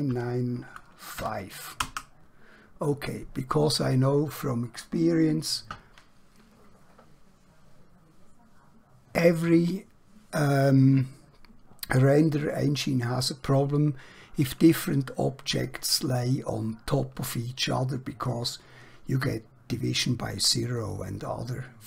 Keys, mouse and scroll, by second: 1.1 typing, 1.9 Return, 20.9 middle click.